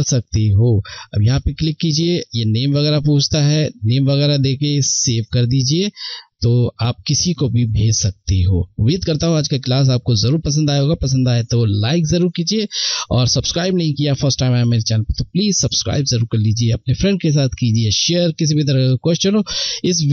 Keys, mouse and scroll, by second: 0.1 click, 4.7 click.